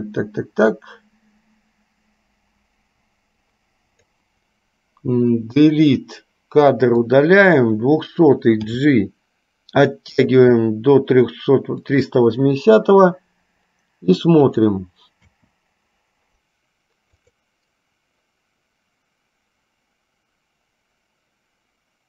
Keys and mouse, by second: 3.5-4.2 drag, 5.7 Delete, 7.1 click, 8.9 g, 14.6 click, 17.5 drag.